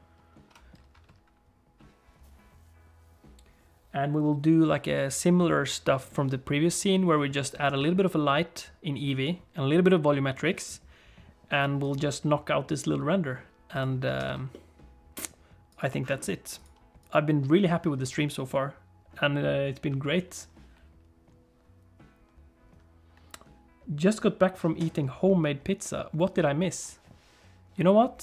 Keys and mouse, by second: 14.2 ctrl+s, 14.5 middle click, 15.7-17.1 drag.